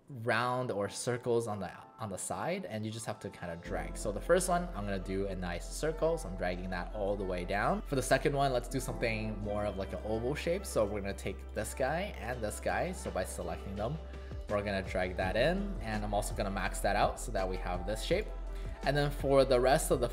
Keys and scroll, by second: 18.8 space.